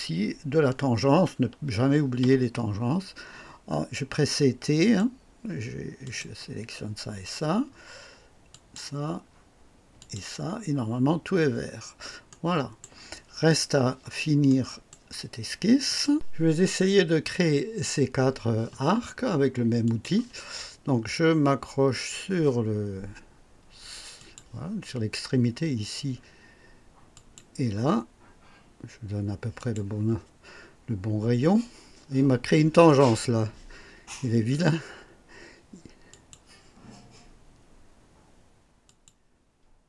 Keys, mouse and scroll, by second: 2.2 t, 4.8 click, 6.0 click, 8.5 click, 10.0 click, 10.8-11.2 scroll down 1, 12.3 right click, 14.4 right click, 15.9 right click, 19.8 click, 24.2 click, 27.1 click, 29.5 click, 36.1 click, 38.8 click.